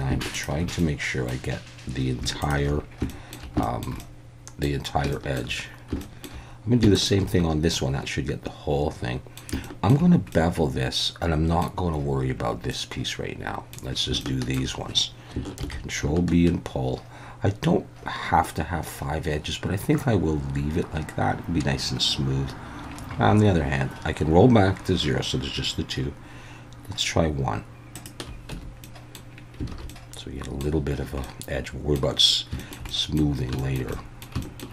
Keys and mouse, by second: 0.8 middle click, 3.1 shift+middle click, 3.6 shift+middle click, 4.0 middle click, 5.1 shift+middle click, 6.0 shift+middle click, 6.9 alt+shift+click, 7.7-9.4 middle drag, 9.6 shift+middle click, 10.3-11.6 middle drag, 12.7-13.7 middle drag, 14.2 shift+middle click, 15.6 ctrl+b, 27.9 shift+click, 28.5 Tab, 28.8-29.1 middle drag, 29.7 alt+a, 29.9-30.6 middle drag, 31.2-32.0 middle drag, 32.6 shift+middle click, 32.9 middle drag, 33.6 shift+middle drag, 33.9 middle click, 34.4 shift+middle click.